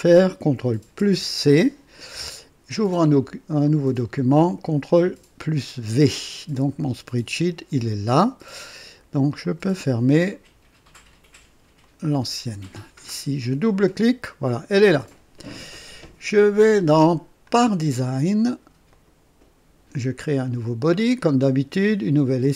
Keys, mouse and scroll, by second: 1.0 ctrl+c, 3.6 click, 4.9 ctrl+v, 6.5 click, 9.4 click, 10.3 click, 11.8 click, 13.5 click, 17.4 click, 18.8 click, 20.9 click, 22.4 click.